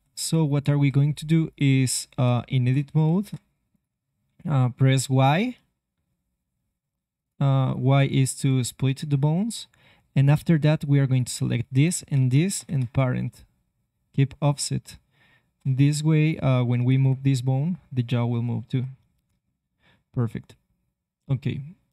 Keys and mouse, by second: 2.2 ctrl+Tab, 3.0 ctrl+Tab, 5.0 y, 12.5 ctrl+p, 14.8 ctrl+Tab, 16.3-18.2 drag, 16.7 r.